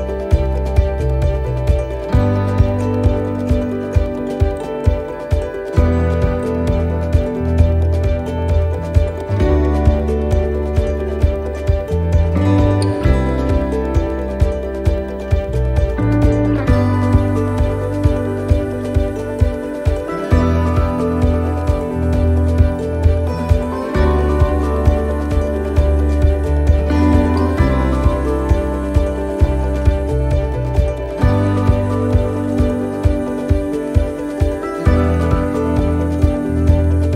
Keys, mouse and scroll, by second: 1.2 click, 2.7 right click, 3.6 click, 6.1 click, 8.4 click, 10.2 right click, 11.1 click, 13.4 middle click, 14.1 shift+middle click, 14.6 middle click, 16.6 shift+middle click, 17.1 middle click, 18.5 click, 20.8 click, 26.3 click, 27.5 right click, 28.9 click, 31.7-32.8 scroll down 8, 32.8 right click, 33.8 click, 36.0 right click, 36.8 click.